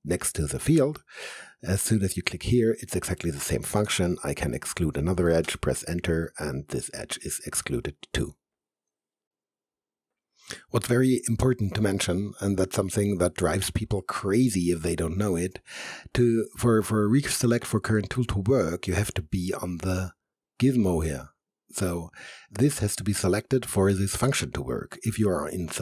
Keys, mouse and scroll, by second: 0.8 click, 3.9 ctrl+Num_Lock, 3.9 click, 5.4 Return.